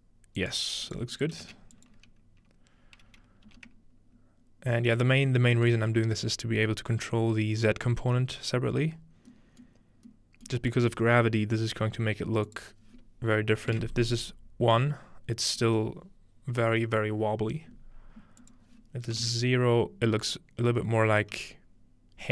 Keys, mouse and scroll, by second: 0.4-3.5 drag, 0.9-2.7 right drag, 5.0-8.9 middle drag, 9.3-11.7 middle drag, 12.5-13.7 drag, 13.9 click, 18.4-20.2 drag.